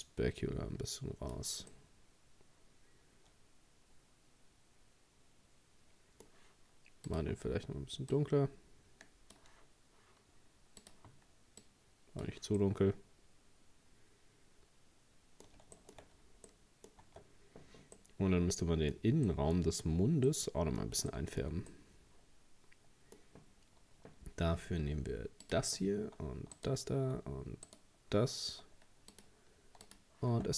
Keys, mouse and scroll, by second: 1.7-4.7 middle drag, 7.1-10.1 drag, 10.8-12.6 drag, 12.6-15.6 middle drag, 15.8 shift+middle click, 16.1-16.5 scroll up 1, 16.5 middle click, 17.0 Tab, 17.4-18.0 scroll up 2, 18.0-19.6 middle drag, 19.6-20.3 scroll up 4, 20.3-24.7 middle drag, 25.5-26.6 drag, 26.6 alt+shift+right click, 27.7 shift+right click, 29.1-30.3 drag, 30.3 Tab.